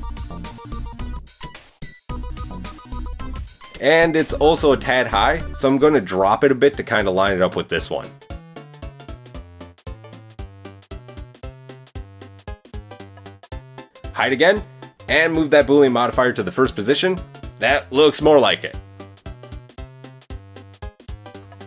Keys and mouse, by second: 0.4 Tab, 2.6 click, 4.0 g, 8.9 Tab, 9.6 Tab, 10.0 Tab, 10.7 Tab, 11.2 g, 12.7 Tab, 14.3 click, 15.2 Tab, 15.5 click, 16.0-17.0 drag, 19.3-21.4 shift+middle drag.